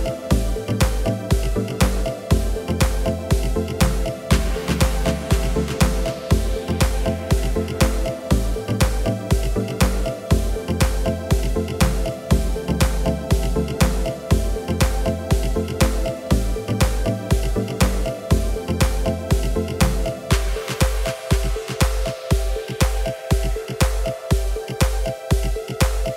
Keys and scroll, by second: 1.9 typing, 3.1 typing, 5.6 typing, 12.2 typing, 13.8 typing, 14.9 KP_5, 15.0 KP_1, 15.1 KP_2, 15.6 Return, 16.5 1, 19.5 typing.